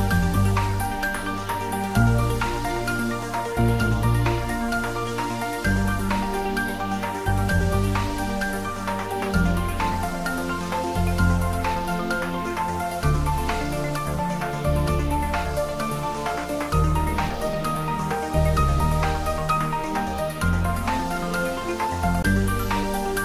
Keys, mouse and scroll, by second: 4.0-8.5 drag.